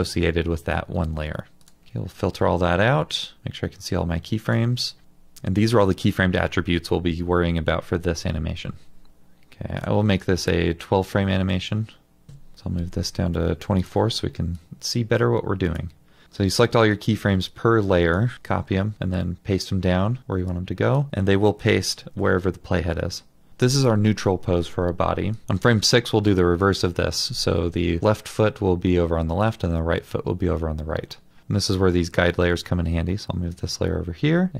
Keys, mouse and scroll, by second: 1.8 scroll up 1, 2.1-3.3 scroll down 1, 12.3 Return, 16.2 double click, 16.9 typing, 17.4 double click, 18.3 typing.